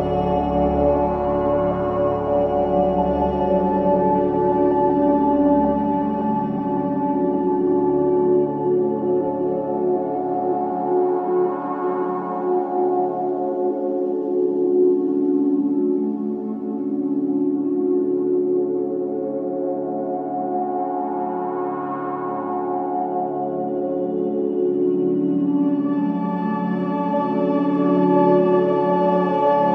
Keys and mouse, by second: 0.0-2.5 typing, 0.9 click, 2.7 click, 3.8-5.5 drag, 4.0-4.7 typing, 5.6-6.6 drag, 7.9-8.7 shift+drag, 9.6-10.3 shift+drag, 11.2-14.8 drag, 13.7-14.5 typing, 15.8 Left, 16.0 Left, 16.4-17.2 typing, 18.7 Right, 18.8 Right, 19.0 Right, 19.1 Right, 19.3 Right, 19.4 Right, 19.6 Right, 19.8 Right, 21.7 i, 23.8-24.6 drag, 25.1 Right, 25.4 Right, 25.7 Right, 26.2 Right, 26.8 Right, 28.2 Right, 28.5 typing, 28.5 Right.